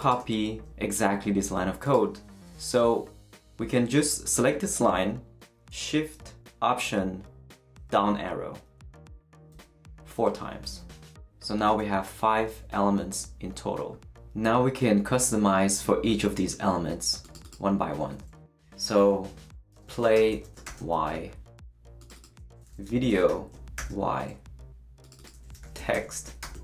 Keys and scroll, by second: 8.8 alt+shift+Down, 19.5-20.6 typing, 22.4-24.3 typing, 25.3-26.6 typing.